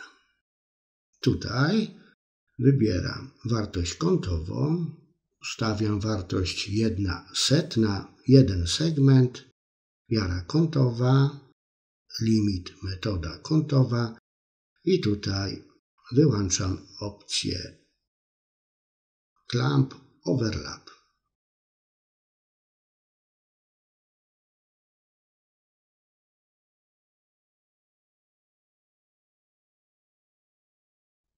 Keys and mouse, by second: 3.3-7.3 drag, 15.9-17.4 drag, 20.3 click, 30.3 click.